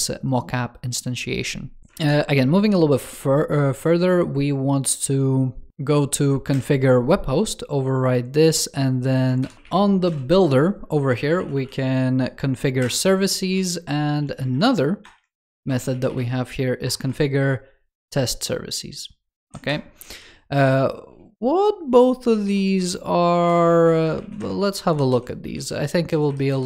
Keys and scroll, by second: 1.8 ctrl+o, 13.9 super+d, 14.4 alt+BackSpace.